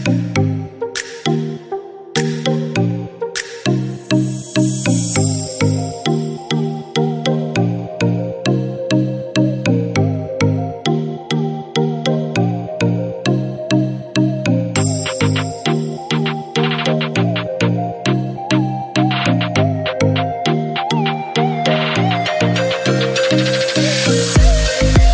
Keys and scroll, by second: 9.1-10.8 typing, 12.9-15.4 typing, 16.7-17.5 typing, 19.8 typing, 22.7-23.4 typing.